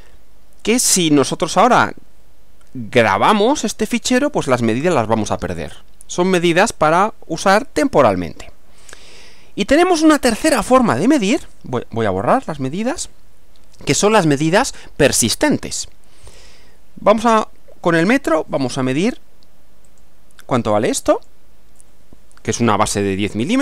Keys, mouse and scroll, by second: 3.0 click, 12.2 click, 16.4 click, 19.9 click, 21.1 click.